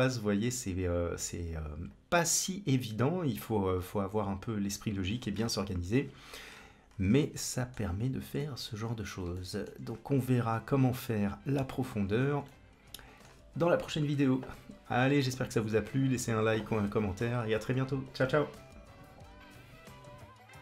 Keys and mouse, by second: 1.7-4.1 drag, 4.6-6.1 drag, 7.1 middle click, 8.3 shift+middle click, 9.3 shift+middle click, 12.4-13.2 middle drag.